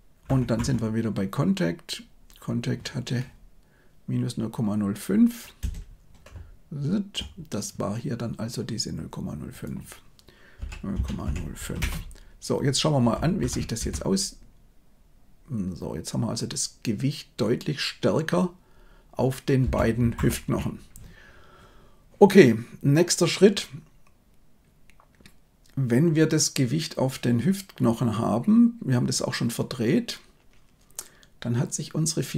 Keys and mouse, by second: 0.2 Left, 0.5 Left, 6.2-7.0 Right, 9.6-11.7 drag, 13.3 shift+Left, 13.7 space, 19.5 space, 20.1 shift+Left.